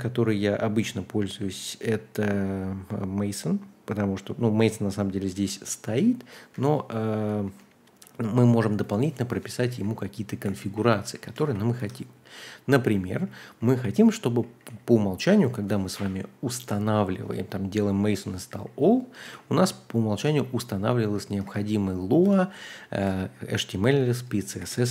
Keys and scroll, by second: 5.9 super+c, 6.5 super+z, 7.4 super+c, 9.7-11.5 typing, 11.7 Escape, 12.8-13.7 typing, 19.2 shift+;, 19.5 w, 20.2 Return, 20.8-23.0 typing, 23.9 Escape, 24.6-24.9 typing.